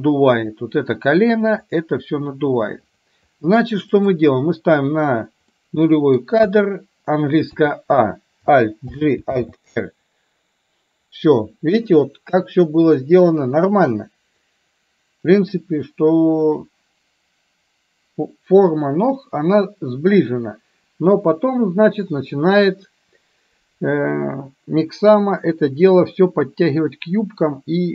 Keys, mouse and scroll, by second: 4.0 click, 5.6-6.2 middle drag, 6.6 KP_1, 7.6 a, 9.0 alt+g, 9.5 alt+r.